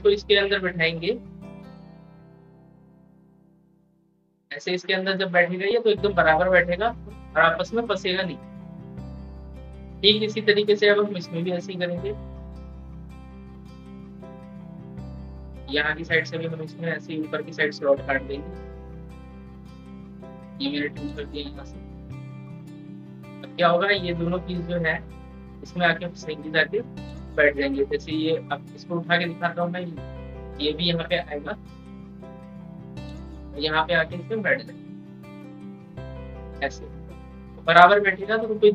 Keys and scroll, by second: 8.3 ctrl+z, 30.6 ctrl+z, 38.5 ctrl+z.